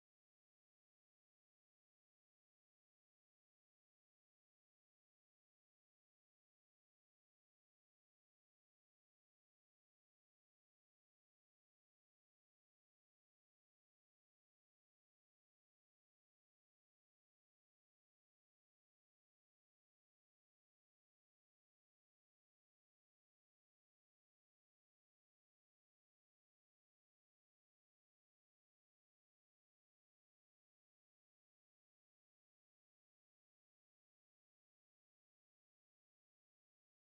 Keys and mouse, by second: 5.4-8.5 drag, 11.8-14.9 drag, 18.7-21.9 drag, 28.6-34.9 middle drag, 34.9-37.1 drag.